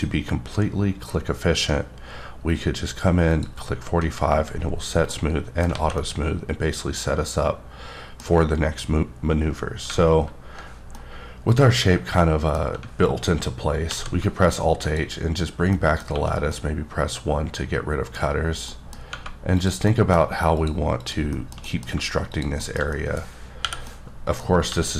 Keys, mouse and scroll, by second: 3.3 click, 4.5-5.1 scroll down 2, 5.1 middle click, 5.7 alt+a, 6.0-8.5 middle drag, 8.8-9.1 scroll up 1, 9.9-10.6 alt+scroll up 1, 10.7 scroll up 1, 11.0 middle click, 13.9 alt+h, 14.9 click, 15.7 middle click, 16.1 1, 16.5 middle click, 18.3 scroll up 1, 18.7 middle click, 19.6 click, 19.9 middle click, 20.6 shift+click, 21.0 shift+double click, 21.3 shift+middle click, 22.3 click, 22.6 shift+middle click, 22.9 scroll up 1, 23.2 middle click, 23.6 o, 23.9 middle click, 24.7 g.